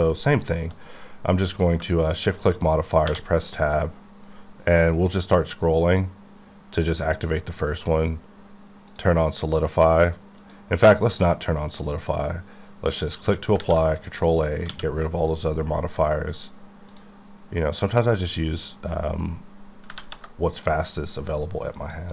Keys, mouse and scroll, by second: 0.5 q, 2.1 shift+click, 4.3-4.9 scroll up 2, 4.9-5.7 scroll down 1, 5.7-6.1 scroll up 1, 8.9 click, 10.4 click, 13.1 click, 13.6 ctrl+a, 14.3 click, 14.7 q, 16.9 click, 18.1 click, 20.3 1, 21.8 click.